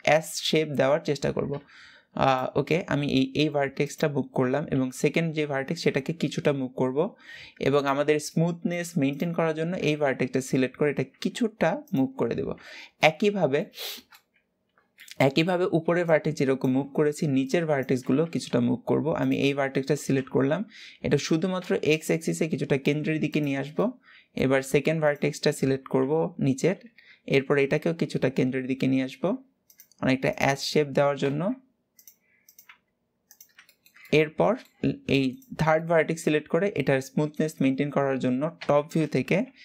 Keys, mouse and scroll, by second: 0.9-1.3 scroll up 1, 1.3 g, 2.4-3.5 middle drag, 3.5 click, 4.4 KP_7, 5.5 g, 8.0 middle click, 8.7 click, 9.7 KP_7, 10.8 g, 12.7-17.9 middle drag, 18.9 click, 19.9 KP_7, 21.0 g, 23.5-24.7 middle drag, 24.7 click, 25.7 KP_7, 26.7 g, 30.0 click, 30.6 g, 32.1 click, 32.3 g, 33.3-35.0 shift+middle drag, 35.0 click, 35.5-36.9 middle drag, 36.9 g, 39.1 KP_7.